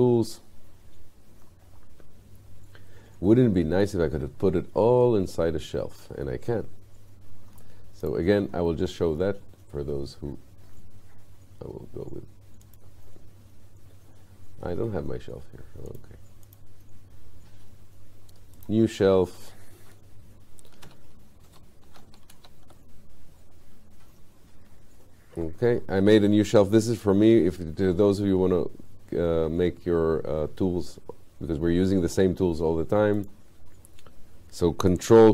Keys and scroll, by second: 20.9 shift+n.